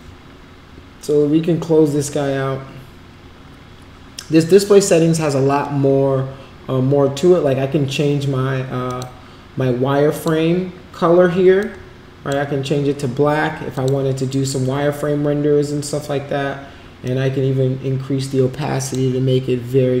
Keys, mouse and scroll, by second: 8.8 click, 10.1 click, 11.6-12.3 drag, 13.7 click, 17.0-18.9 drag.